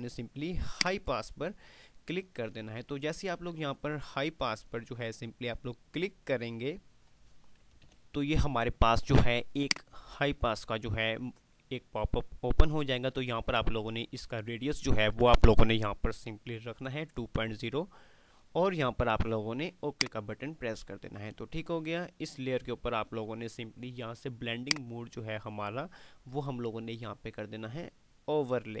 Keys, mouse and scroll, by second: 1.0 click, 7.9 click, 8.6 click, 20.1 click, 24.8 click, 24.8 typing.